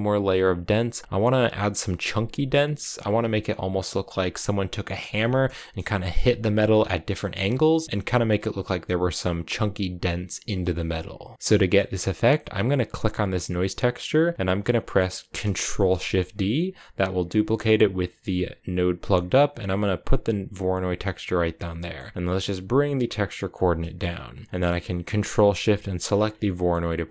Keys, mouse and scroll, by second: 11.2 middle click, 11.4 scroll up 1, 11.5-12.7 middle drag, 12.7 click, 14.4-15.4 middle drag, 15.4 ctrl+shift+d, 21.6 middle click, 22.1 click, 23.6 middle click, 23.9 scroll up 2, 25.8 ctrl+shift+click, 26.2 middle click, 26.6-27.1 scroll up 2.